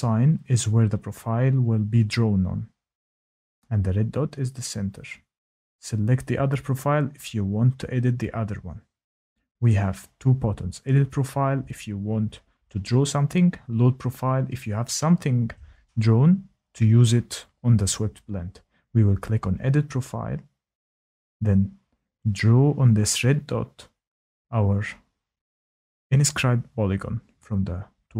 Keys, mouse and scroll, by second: 2.7 click, 6.0 click, 20.1 click, 27.6 click.